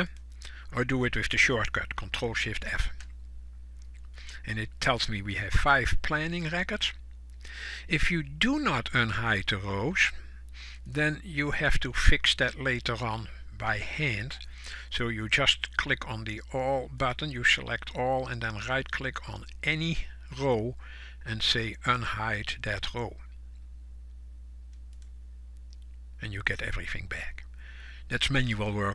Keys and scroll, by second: 25.3 ctrl+shift+f.